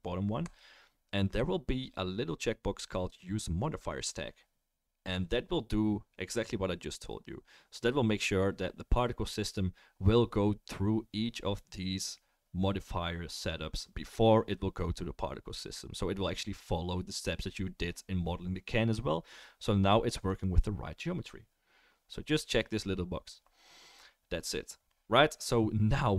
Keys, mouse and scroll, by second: 20.3 click.